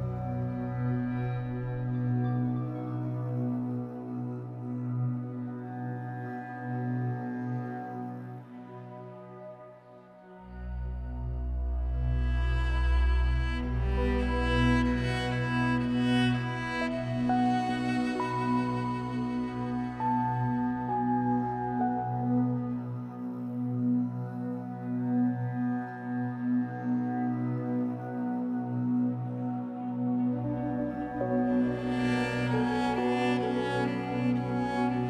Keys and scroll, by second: 19.1 x.